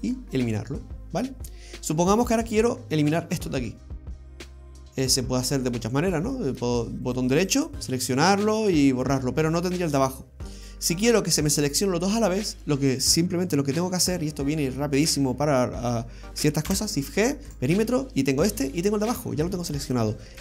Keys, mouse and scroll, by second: 0.5 middle click, 1.8-2.2 scroll up 3, 4.4 middle click, 7.1 right click, 7.4 alt+shift+right click, 7.6 alt+shift+right click, 10.6 right click, 16.7 shift+g, 18.1-18.5 scroll down 1, 18.5 middle click, 19.5-20.4 scroll down 2.